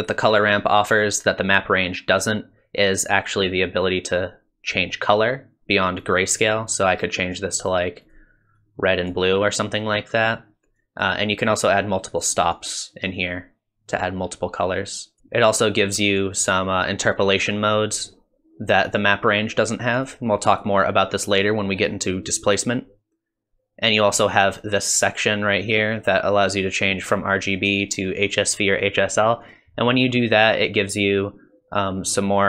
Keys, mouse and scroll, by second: 4.1 click, 4.7 click, 7.6 click, 8.0 click, 10.8 click, 11.5 click, 12.5 click, 16.1 click, 18.9 click, 19.9 click, 20.5 click, 24.3 click, 30.8 click.